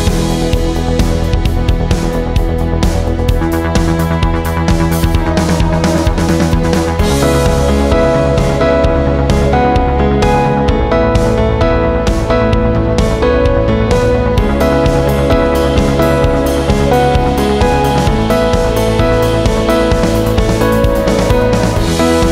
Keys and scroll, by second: 0.2 ctrl+t, 12.1 Return, 21.1-22.3 typing.